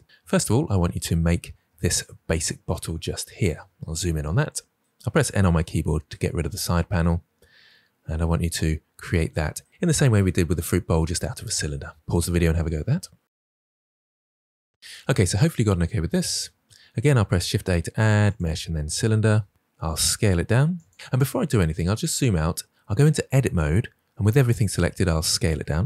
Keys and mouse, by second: 2.3 click, 3.3 KP_Decimal, 5.4 n, 7.9 middle click, 17.0 shift+a, 19.1 s, 23.1 Tab, 24.5 s, 25.7 drag.